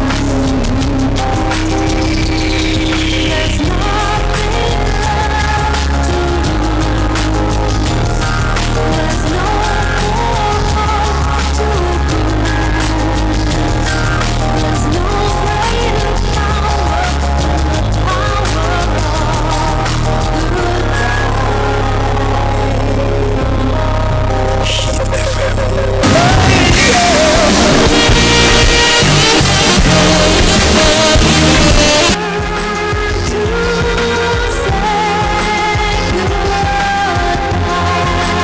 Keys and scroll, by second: 32.2 Page_Down.